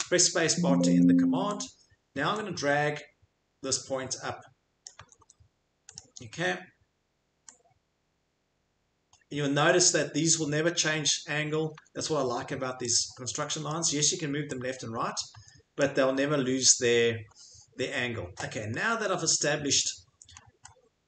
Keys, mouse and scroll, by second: 0.7 Escape, 0.9 Escape, 5.0 Escape, 5.2 Escape, 11.2 click, 11.3 Escape, 11.7 Escape, 15.3 Escape, 18.3 Escape, 19.1 middle click, 19.3 middle click, 19.6 middle click, 20.1 middle click, 20.3 middle click, 20.3 middle click, 20.6 middle click.